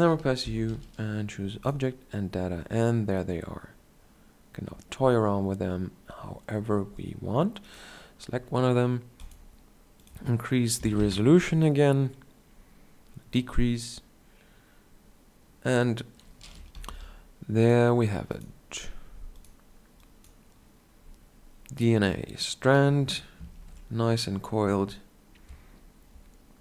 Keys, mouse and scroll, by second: 0.3 u, 23.3 ctrl+Up.